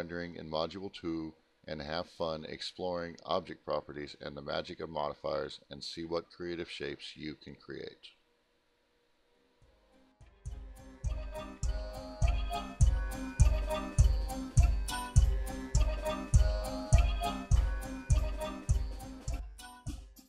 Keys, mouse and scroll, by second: 9.0 alt+F10.